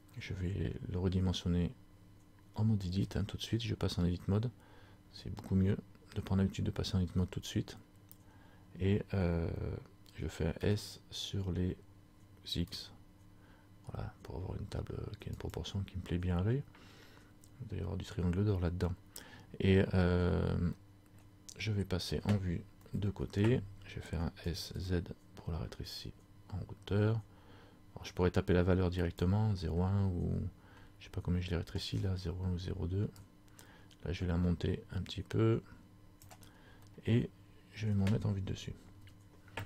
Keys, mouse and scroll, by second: 3.1 Tab, 20.9-21.3 scroll up 1, 21.3 middle click, 22.9 KP_1, 24.5 s, 33.2 click, 37.0 middle click, 39.1 KP_7.